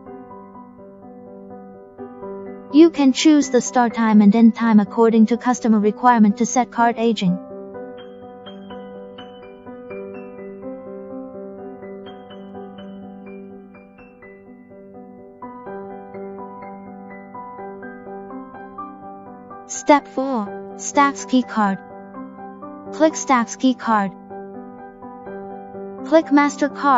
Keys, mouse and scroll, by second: 3.6 click, 5.4 click, 7.2 click, 9.1 click, 10.2 click, 17.4 click, 19.3 click, 25.0 click.